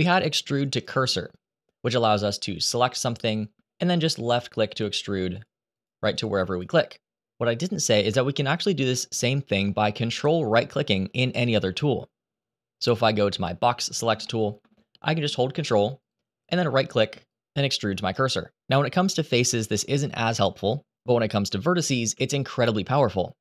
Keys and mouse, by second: 3.5 middle click, 4.4 click, 5.1 click, 5.4 click, 5.9 click, 6.2 click, 7.3 ctrl+z, 7.5 ctrl+z, 7.9 ctrl+z, 8.2 ctrl+z, 13.1 click, 14.0 shift+middle click, 15.7 ctrl+right click, 16.2 ctrl+right click, 17.0 ctrl+right click, 18.0 ctrl+right click, 19.2 ctrl+z, 19.6 ctrl+z, 19.9 ctrl+z, 20.1 ctrl+z, 20.5 ctrl+z, 21.8 a.